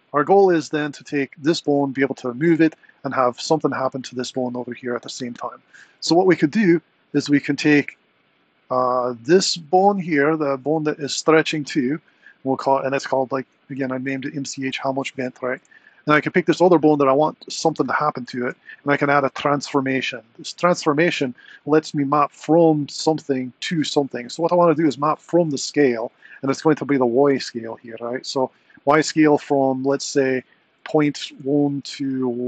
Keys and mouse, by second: 0.0 click, 0.8 click, 1.7 r, 4.4 click, 9.5 click, 16.5 shift+click, 18.3 ctrl+shift+c, 22.3 click, 23.8 click, 25.0 click, 28.7-32.4 drag.